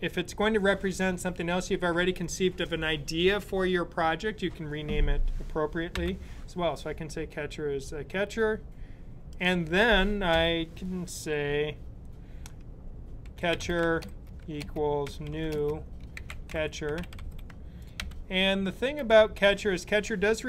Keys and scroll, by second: 5.7 ;, 12.1-18.8 typing.